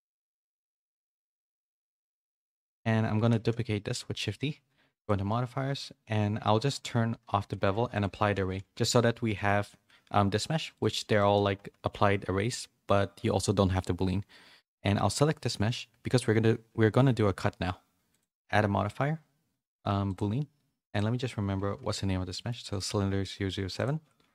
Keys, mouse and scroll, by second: 0.1 Tab, 0.1 s, 1.5 s, 2.0 Tab, 3.3 shift+d, 7.9 click, 8.1 ctrl+a, 8.7 g, 9.8 g, 11.1 middle click, 11.5 g, 15.1 middle click, 18.1-20.1 drag, 20.8 click, 23.9-24.3 drag.